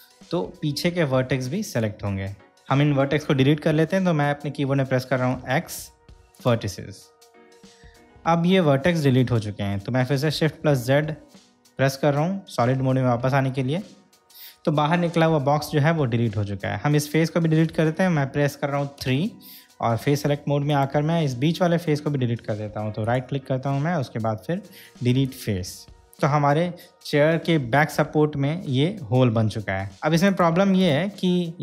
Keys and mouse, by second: 0.4-2.6 middle drag, 5.5 x, 10.9 shift+z, 13.2-13.6 shift+middle drag, 19.2 3, 21.0 click, 23.4-25.6 right drag, 30.0 3, 30.0 2, 30.5 click.